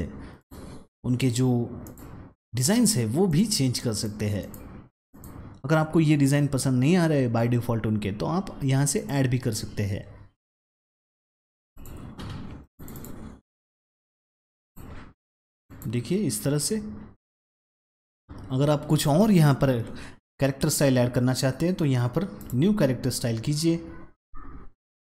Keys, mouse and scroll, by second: 0.3 click, 1.7 click, 3.2 click, 4.3 click, 5.0 click, 8.9 click, 10.7-12.4 scroll down 4, 11.6 click, 12.7 click, 12.8 double click, 14.5 click, 15.6 click, 18.9 click, 22.3 click.